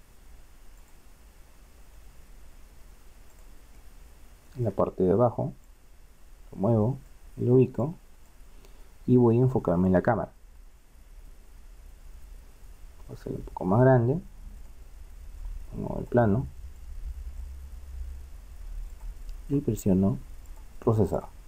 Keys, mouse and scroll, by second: 2.0 s, 3.8 middle click, 5.7-7.3 drag, 8.0-9.2 drag, 11.2 KP_0, 13.5 s, 16.0-18.7 drag, 17.8 s.